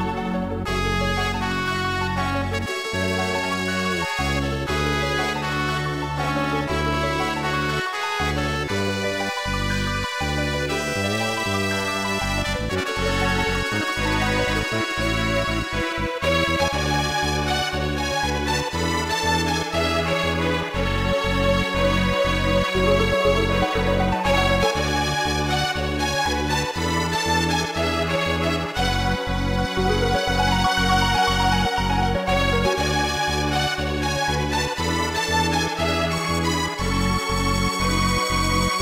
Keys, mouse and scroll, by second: 1.9 ctrl+z, 3.2-4.3 typing, 5.6 ctrl+z, 9.2 scroll up 2, 10.8 ctrl+z, 11.8 ctrl+z, 13.0 ctrl+z, 14.9 right click, 15.8 scroll down 2, 16.3 middle click, 18.1-20.1 typing, 21.2-22.2 typing, 23.3 ctrl+s, 23.5 click, 27.6 click, 33.1 w, 34.5 click, 38.0 s.